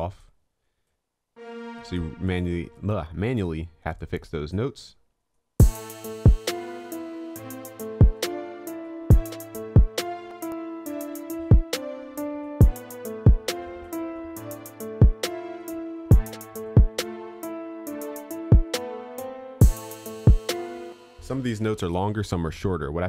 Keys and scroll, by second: 21.7 ctrl+a.